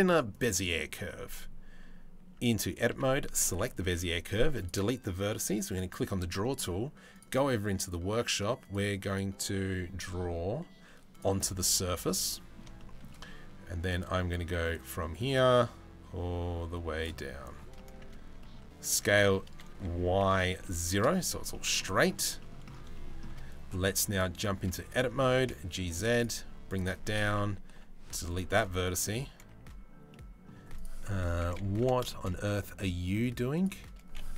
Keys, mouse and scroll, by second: 2.2 Tab, 2.5 a, 3.1 middle click, 3.5 Delete, 5.3 click, 6.7 middle click, 8.2 middle click, 10.7 middle click, 11.7 middle click, 12.4 shift+middle click, 14.4-16.7 drag, 17.4 middle click, 18.0 middle click, 18.5 s, 21.1 middle click, 22.0 shift+middle click, 22.5 shift+middle click, 24.0 shift+middle click, 24.9 g, 27.3 Delete, 29.0 a, 29.7 middle click, 30.4 middle click, 31.4 a, 31.7 shift+middle click, 31.9 middle click, 33.2 right click, 34.0 middle click.